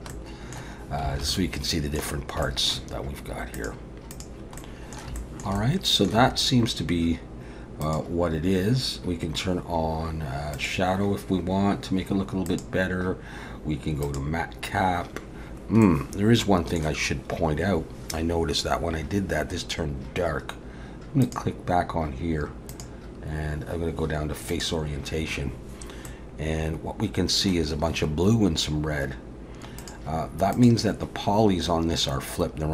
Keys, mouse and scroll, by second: 0.1 middle click, 1.1 alt+a, 1.3 middle click, 2.3 scroll up 1, 2.4 shift+middle click, 3.6 click, 4.1 click, 4.6 middle click, 5.2 shift+middle click, 5.6 middle click, 7.8 click, 12.5 click, 15.8 middle click, 21.2 click, 22.7 click, 26.1 middle click, 29.8 click, 30.5 click.